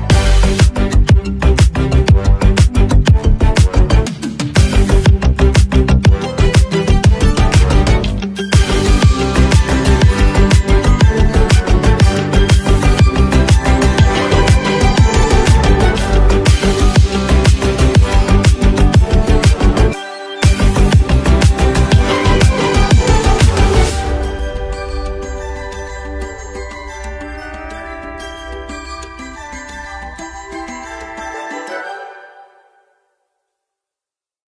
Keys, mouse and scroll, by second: 5.0-5.4 alt+scroll up 1, 6.2 space, 6.3 click, 10.3-11.0 typing, 13.2-14.4 typing, 16.7 typing, 16.8-25.4 drag, 26.5 space, 26.6-29.7 drag, 29.7 space, 29.7-34.4 drag, 34.4-34.5 alt+scroll down 1.